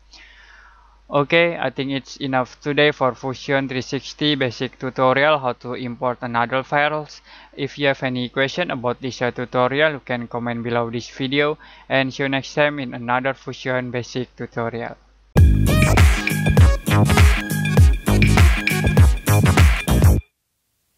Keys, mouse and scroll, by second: 0.0 middle click.